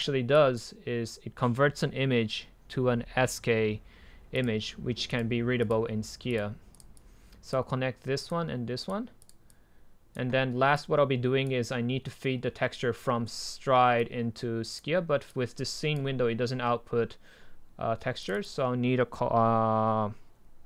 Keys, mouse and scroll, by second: 7.2-8.2 drag.